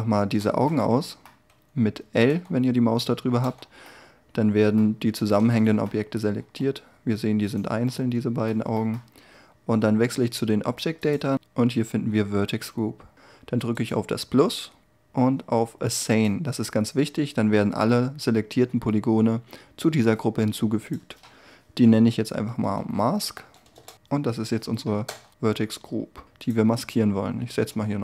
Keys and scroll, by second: 2.3 l, 6.4 g, 23.7 Return, 25.0 Tab.